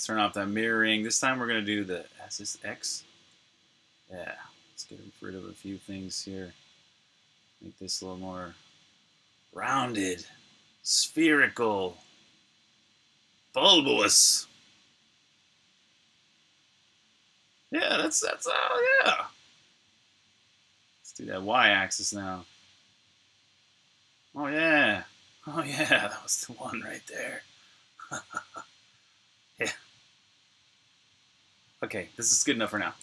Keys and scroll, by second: 32.8 super+s.